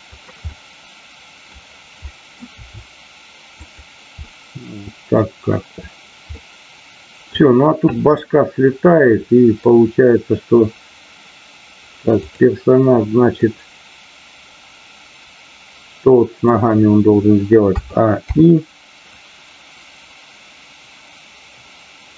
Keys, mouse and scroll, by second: 0.1 click, 0.5 middle click, 2.1 middle click, 2.6 r, 3.6 click, 4.2-5.2 middle drag, 6.3-7.5 middle drag, 8.1-9.7 middle drag, 12.3 drag, 13.5-16.3 middle drag, 19.1-22.1 drag.